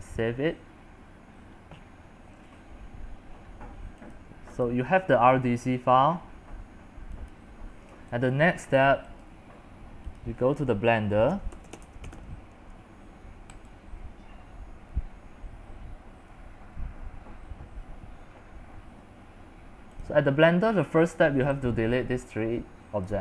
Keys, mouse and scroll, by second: 0.0-10.4 drag, 11.9-12.8 typing, 13.8-18.9 drag, 20.1-23.2 drag.